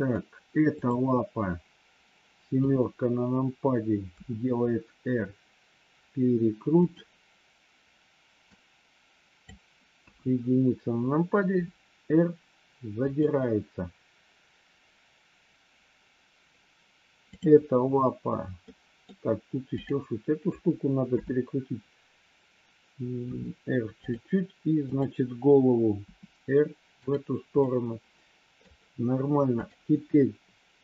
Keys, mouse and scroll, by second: 0.1 scroll down 1, 0.7 click, 2.4 KP_7, 4.1 r, 8.4 click, 9.9 KP_1, 11.4 r, 17.2 click, 18.6 middle click, 20.9 KP_7, 23.2 r, 24.8 click, 26.1 r, 27.6-28.6 middle drag.